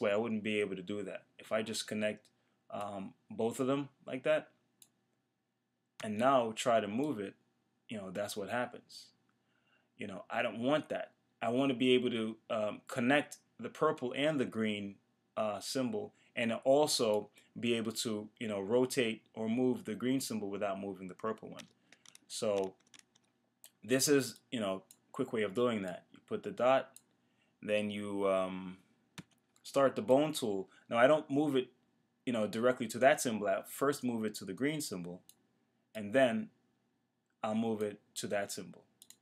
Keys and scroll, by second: 21.7 super+z.